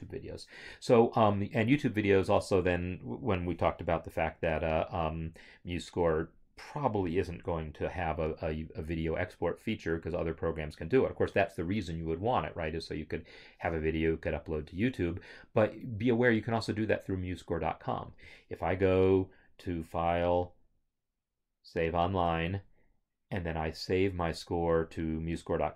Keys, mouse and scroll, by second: 9.1 scroll, 9.7 scroll.